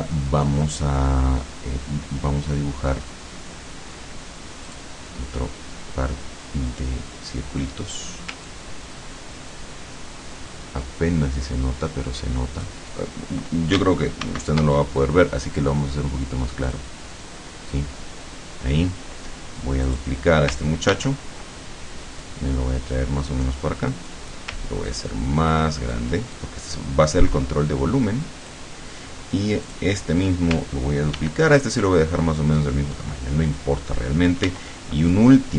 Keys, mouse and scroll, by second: 4.8 click, 8.5-12.9 ctrl+drag, 14.3 ctrl+shift+c, 16.7 click, 19.9 click, 21.0 ctrl+d, 22.3-24.3 drag, 24.9-26.2 ctrl+drag, 26.4-28.7 ctrl+drag, 29.7 click, 31.2 ctrl+d, 31.7-33.8 ctrl+drag, 34.5 ctrl+d, 35.1-35.5 ctrl+drag.